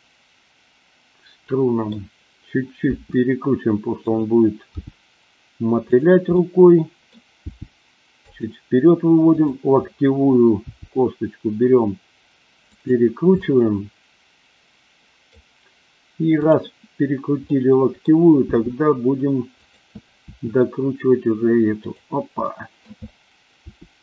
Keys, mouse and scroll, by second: 2.9 r, 4.0 click, 4.7 g, 6.3 middle click, 7.3 g, 8.2 click, 9.2 click, 10.6 g, 12.7 click, 13.4 scroll up 1, 13.5-15.4 middle drag, 16.5-17.0 drag, 17.5 middle click, 18.5 g, 19.6 click, 20.2 r, 21.7 click, 22.5 middle click, 23.7 r.